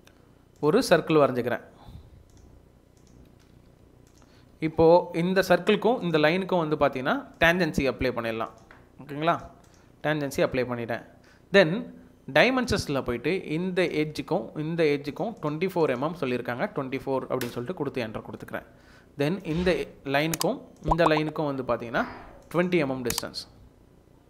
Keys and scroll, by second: 3.3 Escape, 3.6 Escape, 9.9 Escape, 10.7 Escape, 16.7-17.6 typing.